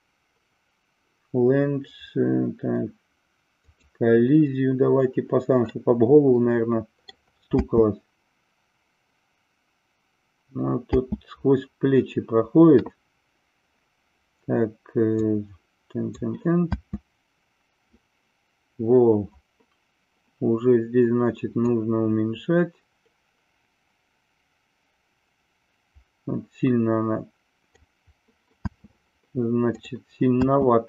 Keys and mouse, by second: 3.6 click, 5.6-7.1 middle drag, 7.5 space, 10.8 space, 15.2 click, 16.7 space, 21.7-27.7 drag, 28.6 space.